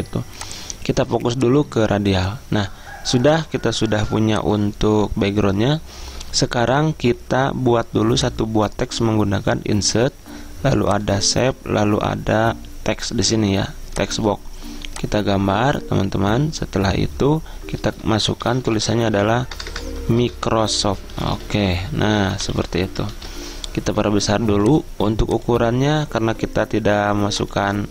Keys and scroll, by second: 18.3-23.1 typing, 23.2 ctrl+a.